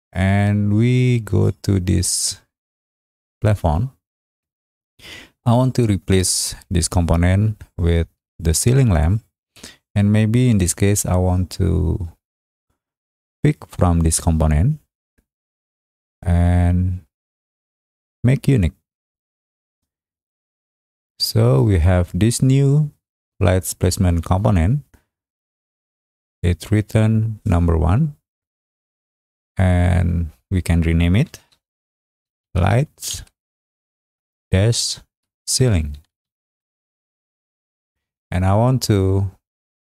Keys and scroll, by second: 31.8-36.7 typing.